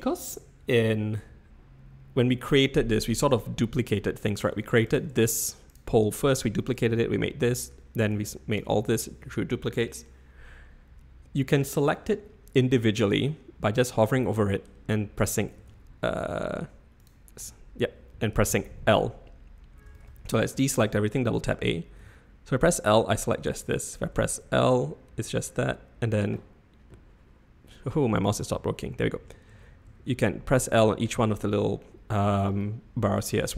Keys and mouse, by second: 4.4 Tab, 5.1 Tab, 5.7 click, 8.1 click, 15.2 l, 15.6 l, 16.6 Tab, 17.4 Tab, 18.5 l, 19.9 a, 20.0 a, 22.0 l, 24.1 l, 29.5-30.9 typing.